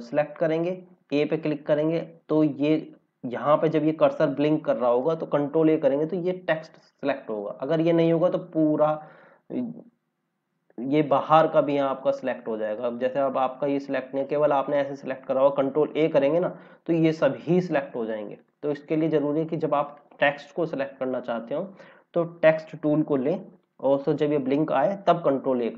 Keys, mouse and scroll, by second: 3.5 scroll up 1, 5.5 ctrl+a, 9.3 scroll down 1, 12.1 click, 15.8 ctrl+a, 18.3 click, 18.9 scroll up 1, 19.9 click, 22.8 click, 25.1 ctrl+a.